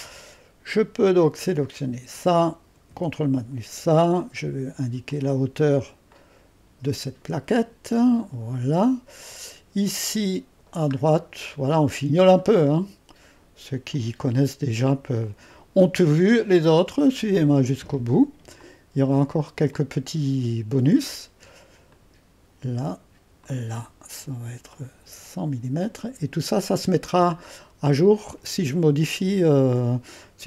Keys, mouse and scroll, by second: 0.2-1.5 scroll up 2, 1.5 click, 2.9 ⌨, 3.3 click, 5.1-8.7 drag, 8.7 middle click, 8.9-10.1 scroll down 2, 10.1-11.2 middle drag, 10.1-10.9 scroll down 1, 11.3-13.5 scroll up 2, 11.9 middle click, 12.7-13.9 middle drag, 13.5-13.9 scroll up 1, 13.9-16.2 drag, 16.5-17.6 drag, 18.6-21.2 drag, 21.9 click, 23.5 click, 24.8-28.0 drag, 28.0-28.5 scroll down 2.